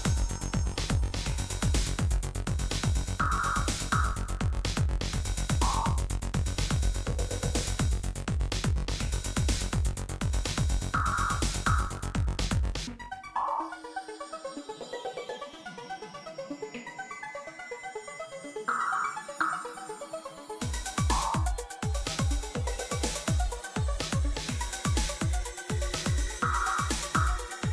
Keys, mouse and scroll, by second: 2.4 super+Return, 4.6-6.0 typing, 6.9 Return, 8.9 typing, 10.3-12.7 typing, 16.7-18.0 typing, 18.8 Return, 20.6-21.8 typing, 21.8 Return, 23.7 super+d, 24.1-27.0 typing.